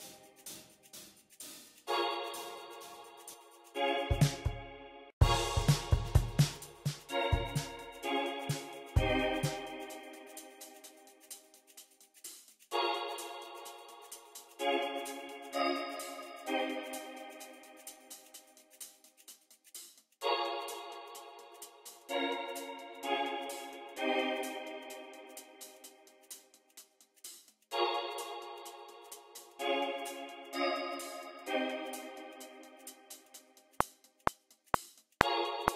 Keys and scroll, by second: 3.9 space, 4.4 e, 5.1 space, 8.0 y, 12.4 x, 14.2 x, 17.7 x, 20.0 super+w, 20.6 alt+super+s, 20.9 x, 25.0 x, 32.1 v, 33.1 r.